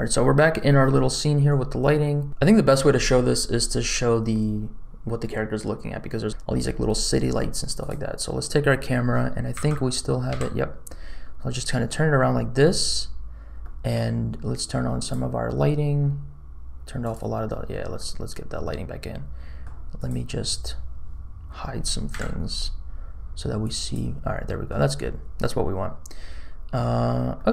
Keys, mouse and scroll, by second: 7.8 click, 9.5 n, 10.3 n, 10.8-12.6 middle drag, 13.1 scroll down 2, 13.6 middle click, 15.0 click, 17.0 click, 17.9-19.6 middle drag, 19.9 click, 22.1 KP_Decimal, 23.6 click, 24.5 middle click, 25.9-26.6 scroll down 2, 27.3 middle click.